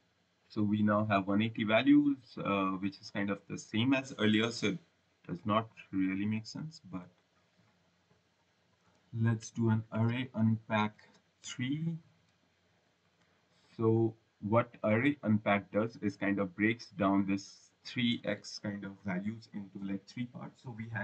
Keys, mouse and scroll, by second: 5.8 click, 8.5 typing, 9.6-12.0 typing, 12.7 click, 13.8 click.